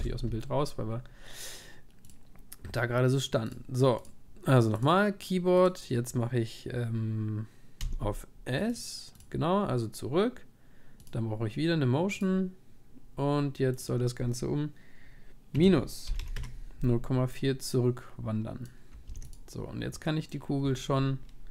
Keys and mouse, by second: 3.1-15.8 drag, 18.6-21.5 drag, 19.1 ctrl+s.